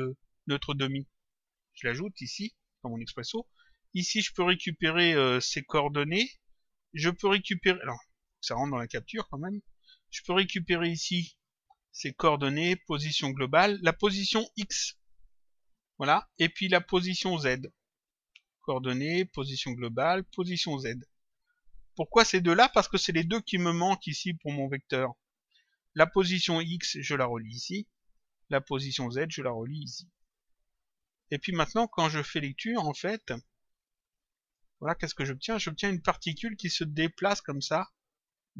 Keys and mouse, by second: 2.4 click, 3.9 click, 8.2 click, 10.9 click, 15.6 click, 17.3 click, 21.0 click, 22.6 ctrl+click, 24.7 click, 26.8 click, 29.0 click, 31.2 click, 33.3 click, 34.4 click, 37.1 click.